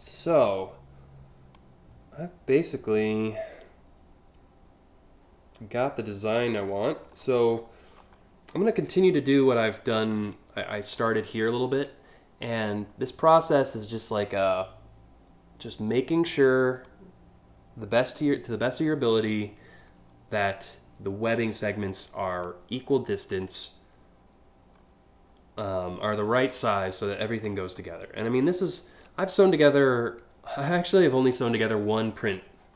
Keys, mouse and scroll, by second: 6.1 alt+scroll up 1, 6.8-7.7 scroll up 7, 9.6 click, 10.6 click, 11.4 ctrl+click, 16.5-17.8 drag, 22.0 click, 22.9 click, 27.1-27.7 scroll up 2, 28.3 alt+scroll up 1, 28.9 scroll up 1, 31.5 scroll down 1, 32.1 scroll up 1.